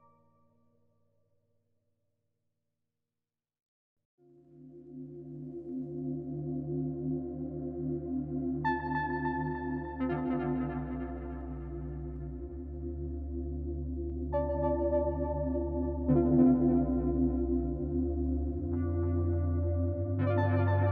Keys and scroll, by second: 3.6 b, 7.2 d, 13.8-14.9 typing, 16.3 z, 19.2 e.